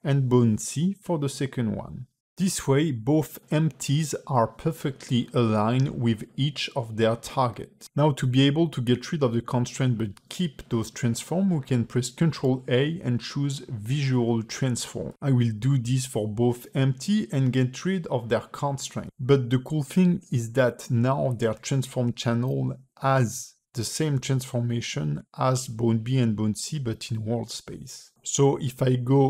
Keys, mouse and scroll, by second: 1.9 click, 2.2 click, 2.5 click, 2.8 click, 5.0 shift+click, 5.6 click, 6.5 ctrl+z, 7.9 click, 27.9 click, 27.9 shift+middle click, 28.6 shift+click.